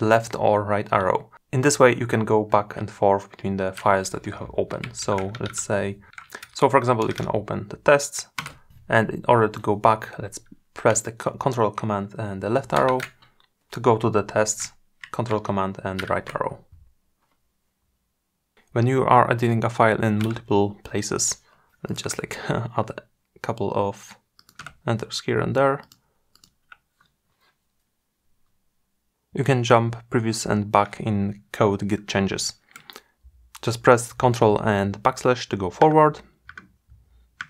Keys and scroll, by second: 11.0 ctrl+super+Left, 15.1 ctrl+super+Right, 34.2 ctrl+\.